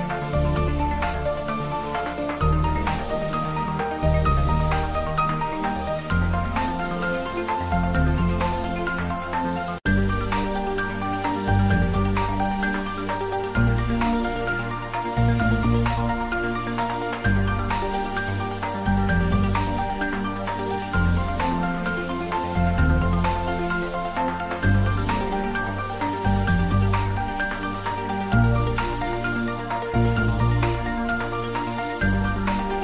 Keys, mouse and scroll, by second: 0.1 ctrl+middle click, 1.7 3, 2.5 click, 3.5 shift+click, 4.0 middle click, 5.2 g, 7.0 click, 7.2 Tab, 7.6 ctrl+z, 8.5 shift+click, 9.4 g, 10.9 z, 10.9 click, 11.1 Tab, 11.4 middle click, 11.8 Tab, 12.1 ctrl+middle click, 12.4 middle click, 13.2 ctrl+z, 13.8 Tab, 14.0 middle click, 14.8 click, 15.6 g, 17.4 click, 17.9 ctrl+middle click, 17.9 ctrl+middle click, 18.5 click, 18.7 s, 19.3 click, 19.6 g, 21.0 click, 21.4 ctrl+s, 22.5 click, 22.9 s, 23.7 click, 24.0 ctrl+s, 24.2 middle click, 25.3 click, 25.7 ctrl+middle click, 26.4 g, 27.3 click, 27.7 shift+z, 28.2 middle click, 28.8 shift+z, 29.6 g, 30.9 z, 31.0 click, 31.2 ctrl+s, 31.4 ctrl+middle click, 31.9 middle click.